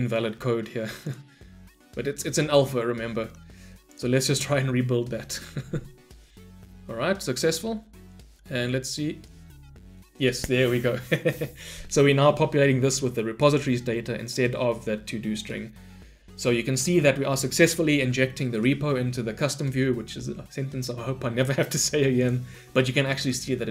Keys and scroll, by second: 3.9 shift+F10.